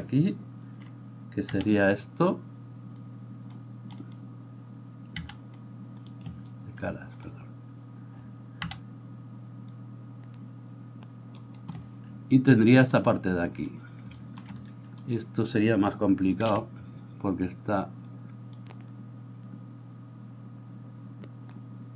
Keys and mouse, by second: 7.3-11.4 drag, 11.4-21.9 middle drag, 16.4 c.